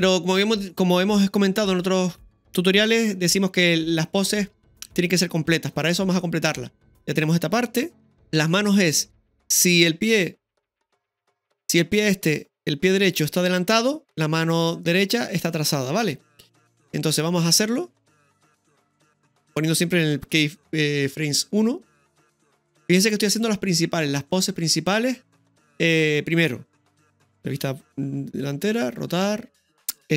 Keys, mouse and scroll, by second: 1.8 space, 8.2 middle click, 8.2 scroll down 1, 8.4-9.8 scroll down 1, 9.8-10.1 middle drag, 10.7 middle click, 10.7 KP_3, 11.1 KP_3, 17.5 right click, 18.2-21.0 drag, 19.2-20.0 typing, 21.0-21.8 scroll up 1, 21.8 scroll up 1, 21.9-22.5 middle drag, 23.4-25.4 drag, 26.9 KP_1, 28.6 KP_1, 29.6 click.